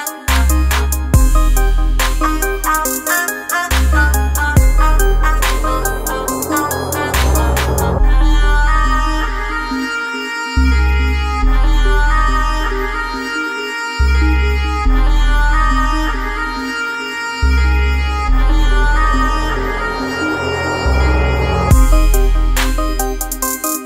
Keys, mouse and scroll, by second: 5.7-7.8 drag, 13.5-14.9 drag, 18.8-20.6 drag.